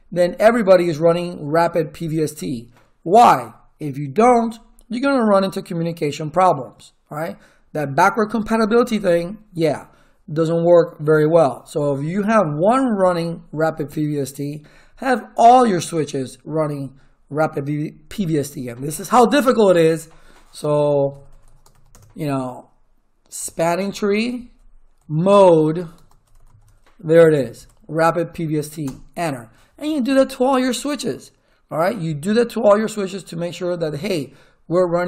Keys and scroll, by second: 20.7-22.2 typing, 23.4-27.3 typing, 24.2 Tab, 27.5 Tab, 28.8 Return.